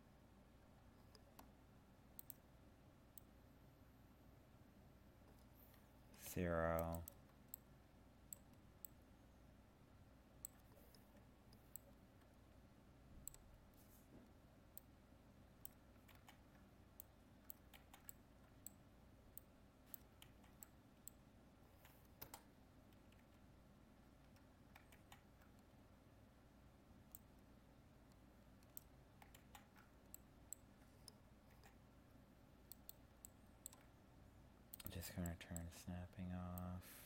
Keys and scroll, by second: 16.1 ctrl+z, 25.0 ctrl+z, 29.4 ctrl+z.